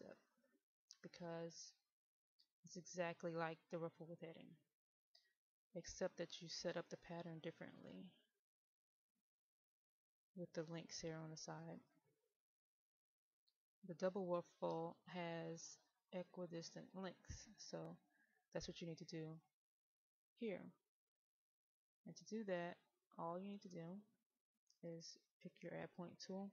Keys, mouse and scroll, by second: 7.8-8.1 scroll down 1, 8.4 middle click, 9.0-9.4 scroll down 1, 10.2 middle click, 11.8-12.4 scroll down 1, 12.4-13.5 middle drag, 13.5-18.7 scroll up 1, 20.2 middle click, 24.8 click.